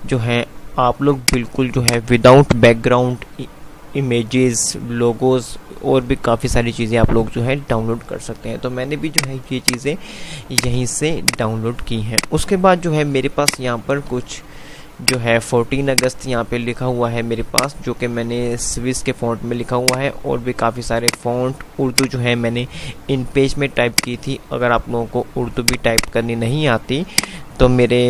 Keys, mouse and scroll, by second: 0.3 typing, 9.3 click, 13.1-14.3 F2, 15.1 click, 22.6 typing.